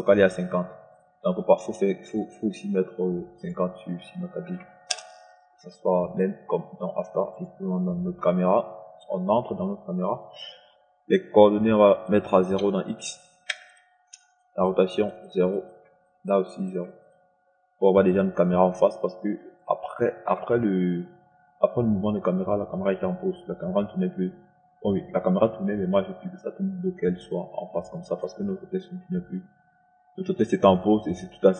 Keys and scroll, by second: 4.7 KP_5, 4.9 KP_0, 5.3 Return, 13.9 KP_0.